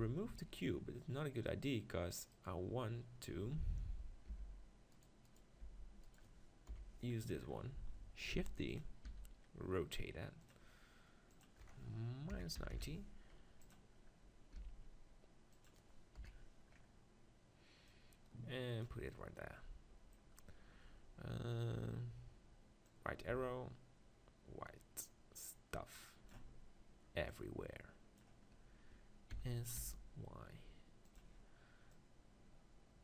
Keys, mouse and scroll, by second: 2.3 right click, 3.0 click, 3.2-4.3 right drag, 4.5 g, 5.3-7.5 right drag, 5.6 g, 6.7 KP_7, 7.5 click, 8.0-9.9 middle drag, 8.4 shift+d, 9.1 r, 10.5-13.1 drag, 14.6 g, 15.6-17.4 drag, 16.2 KP_1, 17.4 middle click, 17.9-19.9 drag, 19.1-21.8 middle drag, 22.9-24.7 drag, 27.3-29.2 drag, 29.3 s, 31.2-33.0 drag.